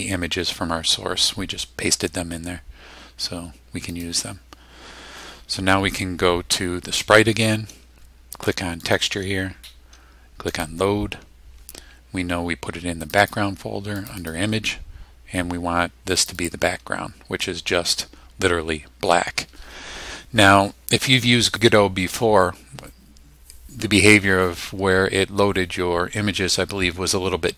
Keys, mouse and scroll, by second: 3.9 click, 8.9 click, 10.5 click, 13.0 click, 14.0 click, 16.2 click.